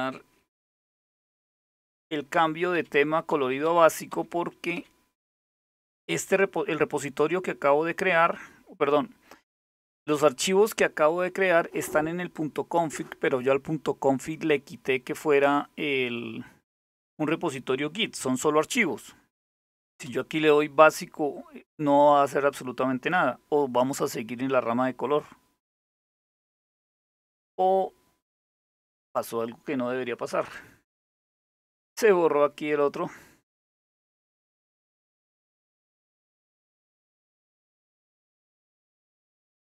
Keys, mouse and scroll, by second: 0.7 alt+super+t, 2.0 Down, 2.4 Up, 2.9 Down, 3.3 Up, 3.8 Down, 4.4 Up, 4.8 Down, 19.1 Up, 19.6 Return, 33.7 click.